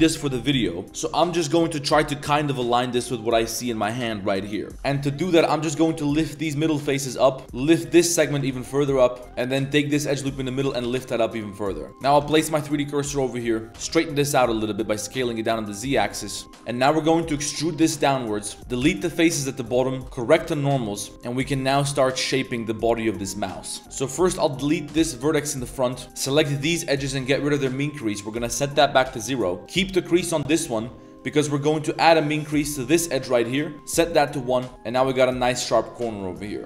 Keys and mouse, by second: 4.7 middle click, 4.9 middle click, 5.4 middle click, 5.8 g, 7.4 1, 7.7 alt+click, 8.3 g, 9.2 2, 9.9 alt+click, 10.3 middle click, 10.6 g, 11.9 1, 12.0 click, 12.2 shift+s, 13.2 click, 13.7 z, 13.7 s, 14.0 s, 16.1 middle click, 16.6 a, 16.7 middle click, 17.4 e, 18.6 shift+s, 18.6 g, 18.8 x, 19.9 click, 20.0 Tab, 20.0 a, 20.3 shift+n, 20.6-21.0 drag, 21.1-21.5 drag, 21.8-22.4 middle drag, 23.1 middle drag, 23.6 middle drag, 23.8 ctrl+z, 23.8 3, 24.0 1, 24.3 click, 25.0 x, 26.0 ctrl+shift+z, 26.2 shift+click, 26.4 middle click, 26.8 shift+click, 27.1 shift+click, 28.4 click, 29.5 middle click, 29.6 drag, 29.6 typing, 31.4-31.8 middle drag, 32.1 shift+click, 32.5 middle click, 33.7 click, 34.3-34.7 middle drag, 36.2 middle click, 36.6 Tab.